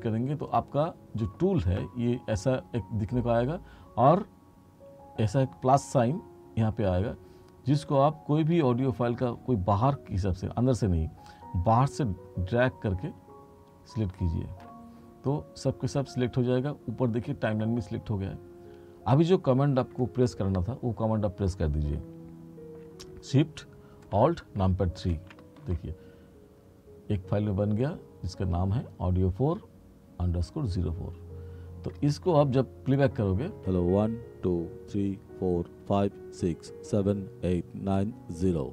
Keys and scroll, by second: 25.2 Page_Down, 33.7 space.